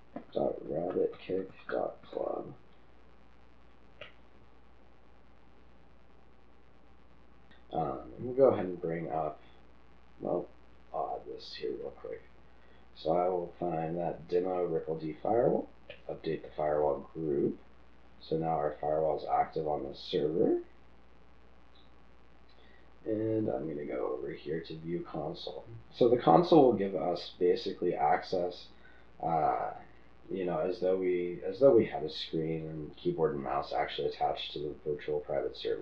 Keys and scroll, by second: 0.0-2.4 typing.